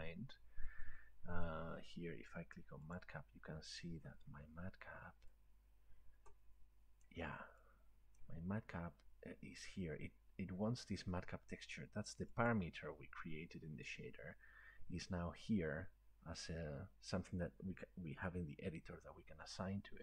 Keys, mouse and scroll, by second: 3.0-6.9 drag, 8.2 click, 12.5 click, 14.9-17.6 drag.